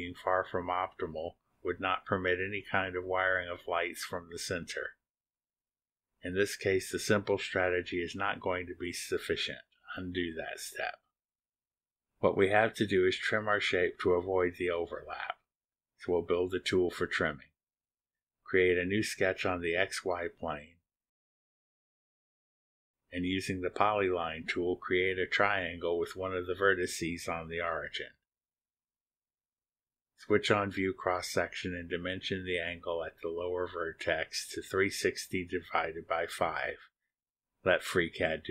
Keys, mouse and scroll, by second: 0.0 click, 0.0 middle click, 0.3-1.5 drag, 1.8 click, 1.9-3.9 middle drag, 3.9-5.7 drag, 5.7-6.3 scroll up 1, 6.3 click, 6.4-7.2 middle drag, 8.6 click, 10.0 Delete, 12.5 click, 13.5-15.5 middle drag, 13.5-15.5 scroll down 1, 19.6 click, 20.8 click, 21.5 middle click, 21.6 scroll down 1, 24.7 click, 26.2 click, 27.8 click, 28.8 click, 30.1 click, 32.1 click, 32.9 click, 33.8 ctrl+click, 35.1 click, 36.7 click, 37.5-38.5 typing.